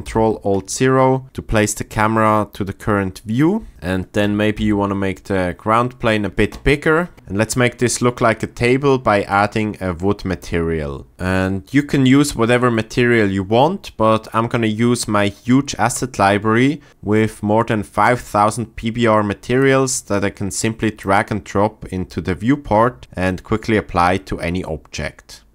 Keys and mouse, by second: 0.0 g, 4.6 s, 11.1 t.